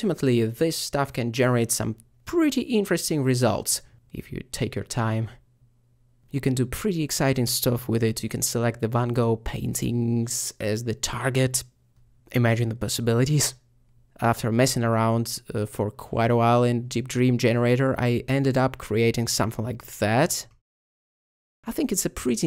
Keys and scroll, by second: 0.0-0.5 typing, 2.0 Return.